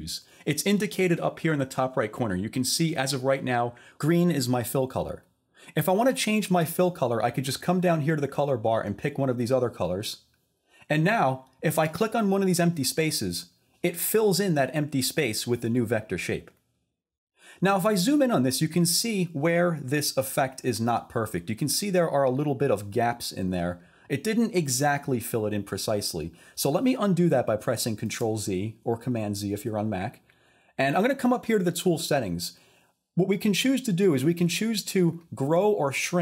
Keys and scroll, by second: 28.1 super+z.